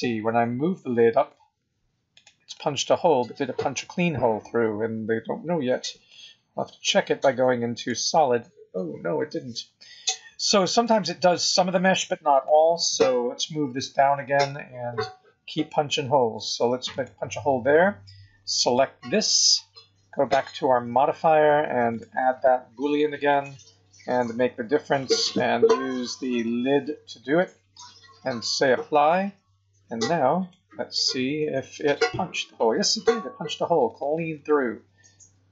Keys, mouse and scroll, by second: 0.2 g, 2.5 middle click, 6.7 z, 8.8 scroll up 1, 9.1 scroll down 3, 10.7 click, 12.3 click, 13.7 g, 18.6 click, 21.8 click, 24.9 click, 28.9 click, 30.3 click, 31.5 g, 34.3 middle click.